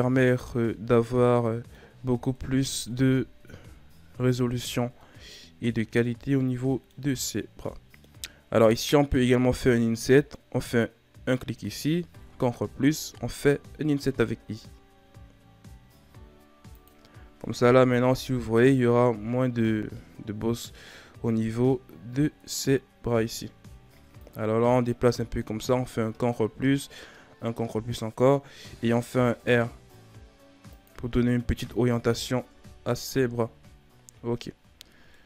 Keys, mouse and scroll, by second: 0.1 scroll down 1, 0.2-2.3 middle drag, 2.3 KP_1, 2.7 Tab, 3.4-4.4 scroll down 4, 4.4-4.9 scroll up 3, 4.9-5.4 middle drag, 5.4-5.7 scroll up 2, 5.7 Tab, 6.0-7.1 middle drag, 7.1-7.6 scroll up 1, 7.6-8.7 middle drag, 8.7 right click, 12.2 ctrl+KP_Add, 17.1-17.8 scroll down 1, 17.8 KP_1, 18.1 Tab, 19.1-19.8 scroll down 3, 19.8-20.4 scroll up 4, 20.4 Tab, 24.1-26.0 drag, 26.0 ctrl+KP_Add, 27.3 ctrl+KP_Add, 28.8 r, 31.2-32.3 scroll down 5, 32.3 Tab, 32.6-32.9 scroll down 4, 32.9 a, 33.8-34.5 scroll up 3, 34.8-35.1 scroll down 2, 35.1 middle click.